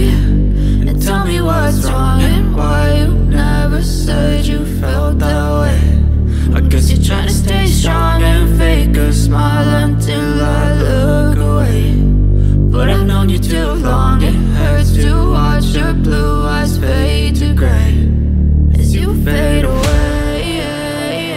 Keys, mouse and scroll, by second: 8.5 click, 8.5-11.6 drag, 19.6 click.